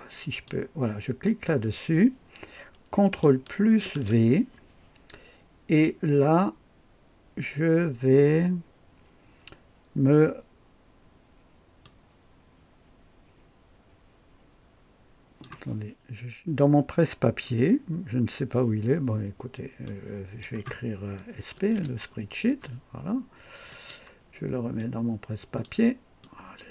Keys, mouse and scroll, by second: 0.2 click, 3.8 ctrl+v, 11.8-15.4 drag, 15.7 click, 19.8 click, 21.3-22.2 typing, 23.7 click, 24.7-25.6 drag, 26.2 click.